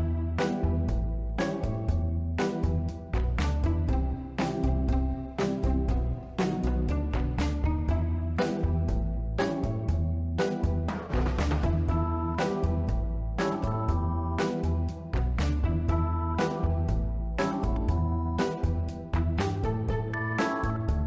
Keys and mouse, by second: 0.3-4.0 typing, 2.5 click, 5.1 y, 5.9 click, 6.5 click, 7.9 ctrl+z, 8.1-9.3 drag, 9.8 Tab, 11.6 click, 12.5 click, 14.1 click, 15.3-15.7 middle drag, 16.4-17.8 drag, 18.1 click, 19.3 click.